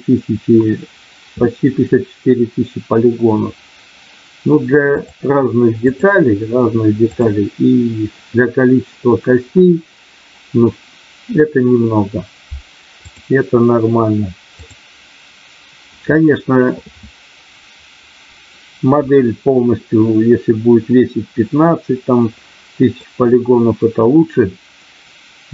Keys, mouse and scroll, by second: 7.0 click, 23.0-25.5 middle drag.